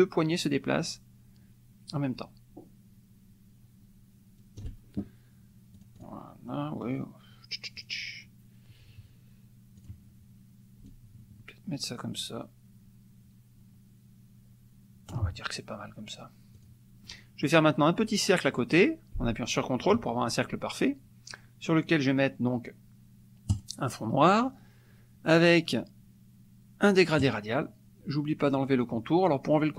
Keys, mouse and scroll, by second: 5.8 click, 6.5 middle click, 7.8 click, 9.8 click, 10.9-15.3 ctrl+drag, 16.5 click, 17.0 middle click, 18.0-20.1 drag, 23.5 click, 27.2 click.